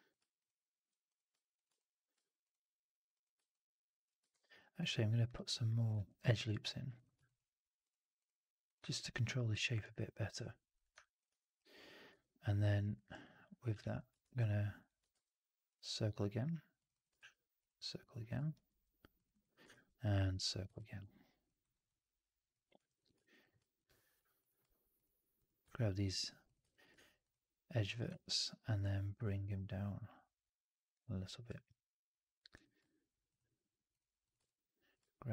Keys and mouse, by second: 1.7 alt+click, 3.4 alt+click, 4.2 shift+f, 5.1 click, 6.3 click, 7.1 alt+click, 7.7 click, 8.1 click, 8.6 click, 8.8 alt+click, 10.9 alt+click, 11.2 w, 12.0 2, 13.7 shift+x, 15.0 shift+Tab, 17.1 shift+Tab, 18.4 shift+x, 19.2 click, 19.6 shift+Tab, 20.7 alt+click, 21.5 right click, 21.8 click, 22.6 1, 25.6 alt+click, 26.3 shift+click, 26.6 alt+click, 28.1 alt+click, 30.9 click, 34.3 alt+click.